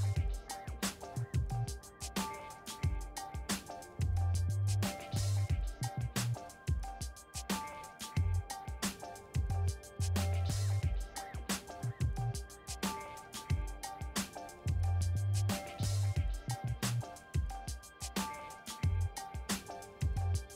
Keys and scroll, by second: 0.6-1.6 typing, 1.8 Return.